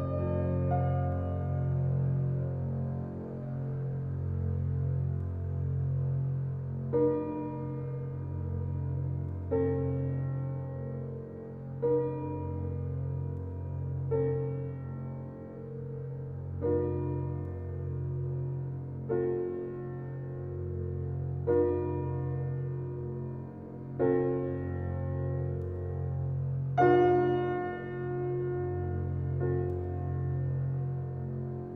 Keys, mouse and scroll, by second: 1.1 click, 1.8-2.3 scroll up 1, 2.6 click, 3.0-4.4 scroll down 1, 4.4-9.8 drag, 9.8-10.3 scroll up 1, 13.5 s, 15.4-16.3 typing, 16.4 Return, 17.1 scroll up 1, 21.8 click, 22.2-22.6 scroll down 1, 25.7 click, 26.1 scroll down 1, 27.3 scroll up 1, 28.9 click, 29.3 scroll down 1, 30.0-30.6 scroll up 1, 30.6 scroll down 1, 31.6-31.7 scroll up 1.